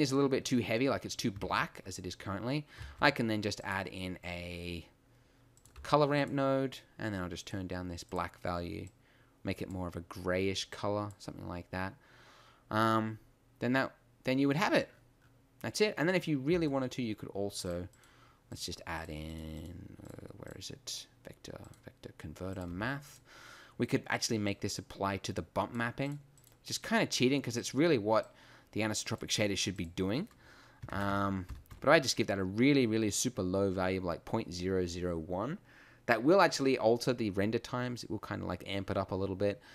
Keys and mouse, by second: 5.6 shift+a, 5.9 g, 8.1-8.9 drag, 10.3 click, 16.7 shift+a, 22.8 g, 23.5-24.2 drag.